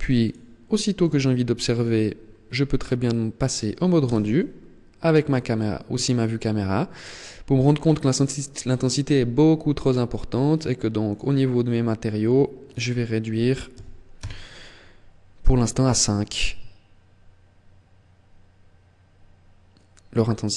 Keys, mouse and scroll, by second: 0.8 click, 3.7 KP_0, 4.7-5.1 scroll up 3, 10.4 click, 12.3 click.